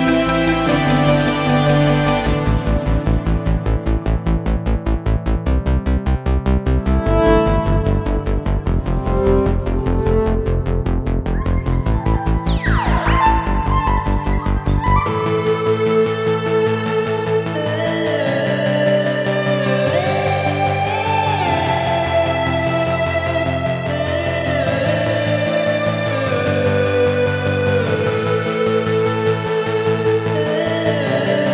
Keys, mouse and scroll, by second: 0.5 click, 1.4-1.8 shift+drag, 2.7-3.9 drag, 3.7 right click, 4.6 click, 5.4 click, 6.1 right click, 6.8 click, 7.1 ctrl+s, 8.4 click, 8.9 click, 9.2 click, 9.7-10.6 typing, 11.5 right click, 12.1 click, 12.7 click, 13.4-13.8 drag, 14.0 click, 14.9-15.5 drag, 15.7-16.7 drag, 17.0-17.5 drag, 17.9-19.0 drag, 19.2-20.6 drag, 21.0-21.6 drag, 22.2 click, 23.7-24.2 drag, 24.3 click, 26.0 click, 26.8-27.4 drag, 28.1 click, 30.3-30.8 drag, 31.1 right click.